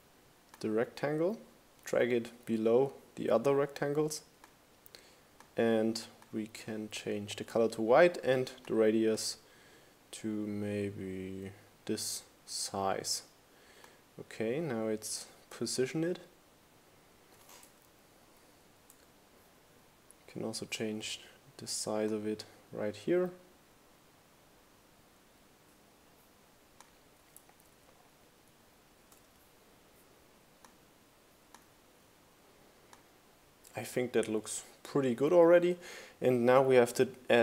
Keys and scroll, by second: 16.7 shift+Up, 26.2 shift+Right, 26.7 shift+Down, 27.2 shift+Up.